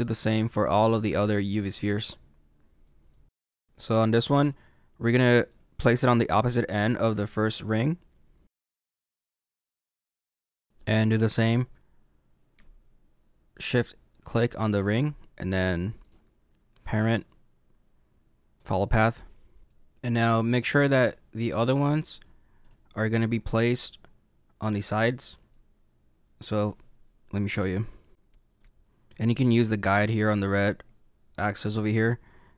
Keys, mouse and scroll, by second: 1.0 middle click, 2.8 middle click, 3.3 middle click, 3.3 g, 3.4 y, 3.5 middle click, 4.3 middle click, 8.5-10.4 typing, 10.0 shift+middle click, 10.0 scroll up 2, 10.1 middle click, 10.5 middle click, 14.2 shift+click, 15.9 right click, 19.6 middle click, 19.6 middle click, 22.6 click, 23.5 middle click, 25.5 middle click, 27.6 g, 28.6 y, 28.6 middle click.